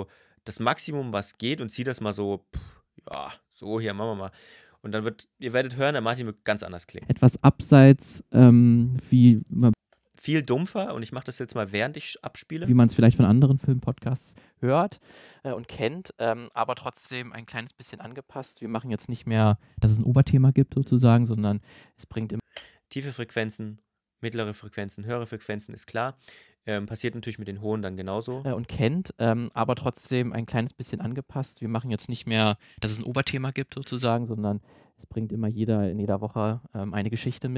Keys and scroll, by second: 6.8 space, 9.5 space, 12.4 space, 22.2 space, 28.1 space.